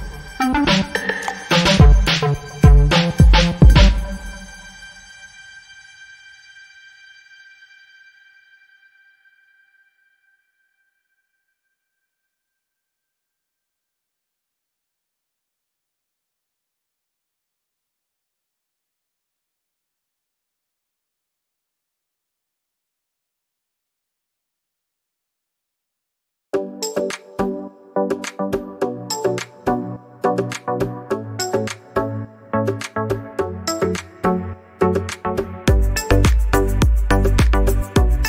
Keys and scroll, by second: 22.5 2, 24.8 Return.